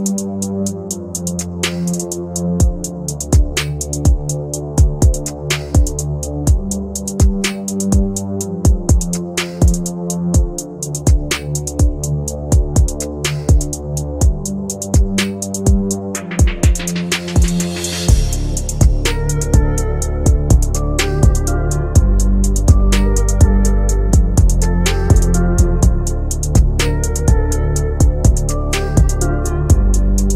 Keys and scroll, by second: 23.3 F3.